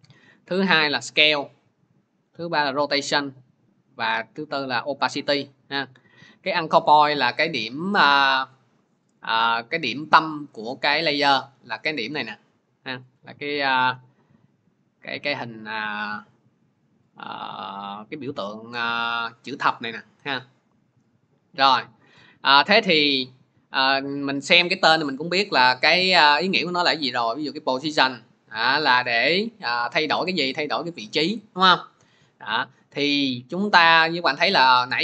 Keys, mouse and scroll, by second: 1.0 click, 12.7-13.2 scroll, 13.4-13.9 scroll, 15.7 scroll, 20.6 scroll, 22.4 click, 26.7 click.